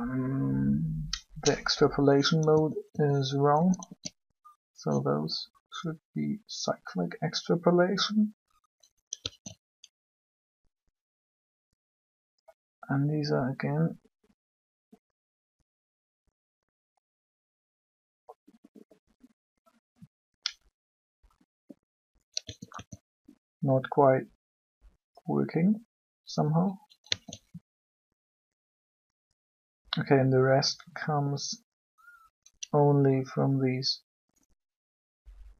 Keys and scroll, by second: 2.4 a, 2.8 a, 3.5 a, 5.2 typing, 9.0 alt+a, 22.3 a, 22.7 a, 27.0 alt+a.